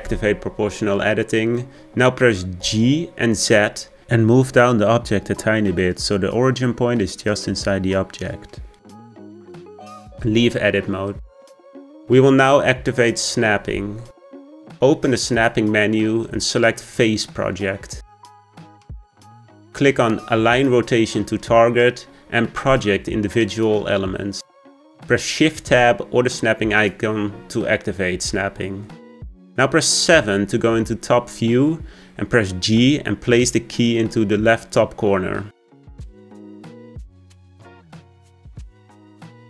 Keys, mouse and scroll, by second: 0.5 o, 2.5-3.5 scroll up 1, 3.5 g, 11.9 Tab, 17.0-20.1 drag, 28.5 click, 31.8 KP_7, 34.4 g.